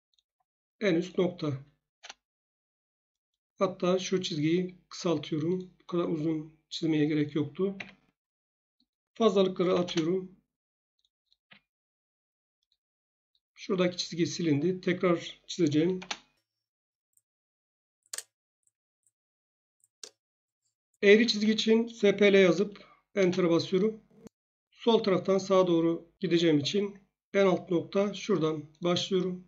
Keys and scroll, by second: 1.9 Return, 7.7 Escape, 9.4-10.3 typing, 11.4 Escape, 15.9 Return, 15.9 l, 18.1 space, 20.0 Escape, 21.1-22.3 typing, 23.1 Return.